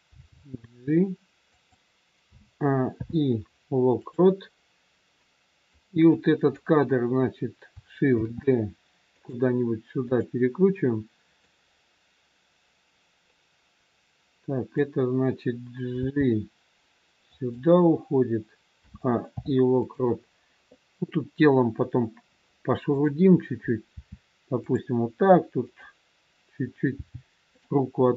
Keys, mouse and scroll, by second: 0.1 g, 2.2 a, 2.8 i, 5.1 click, 6.0 click, 8.2 shift+d, 10.0 click, 11.4 click, 16.0 g, 18.7 a, 19.3 i, 22.8 click, 23.8 r, 25.7 click, 26.9 g.